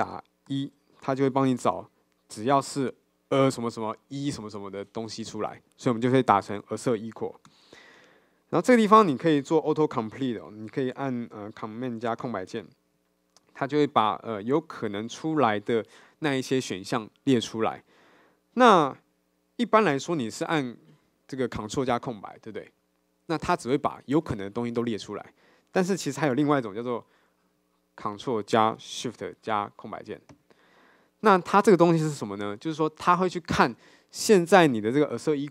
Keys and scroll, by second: 7.7 Return, 12.5 ctrl+space, 30.4 ctrl+shift+space.